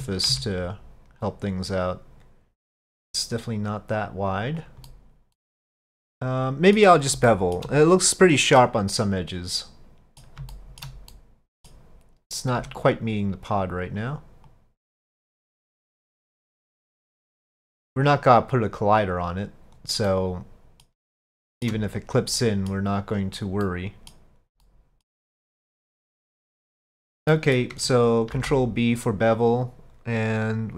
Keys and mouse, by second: 5.0-6.9 middle drag, 7.4 shift+middle drag, 8.6-10.2 middle drag, 10.5 shift+middle drag, 11.1-11.8 middle drag, 12.6 Tab, 13.5 click, 14.5-15.9 drag, 16.1 middle click, 17.2 click, 18.1-19.8 drag, 20.1 middle click, 21.4 shift+middle click, 22.4 middle click, 23.2 click, 23.7 middle click, 24.7 click, 25.6-27.1 drag, 27.4 middle click, 28.4 ctrl+b.